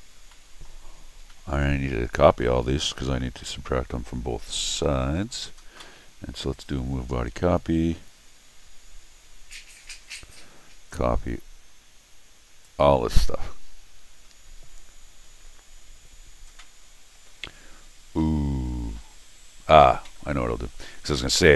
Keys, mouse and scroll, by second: 0.3 middle click, 1.3 middle click, 2.4-5.2 middle drag, 6.5 click, 10.9-12.6 drag.